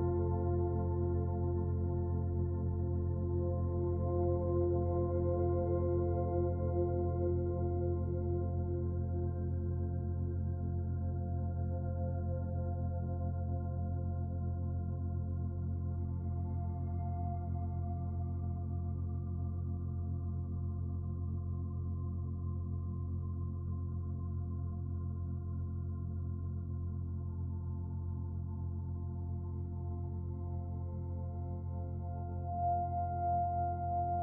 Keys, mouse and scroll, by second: 0.9 shift+middle click, 1.6 middle click, 4.2 middle click, 4.9 alt+click, 6.4 click, 7.5 alt+click, 8.2 middle click, 10.5 shift+s, 16.5 middle click, 17.8 shift+a, 20.3 s, 25.1 s, 29.3 click, 30.8 click.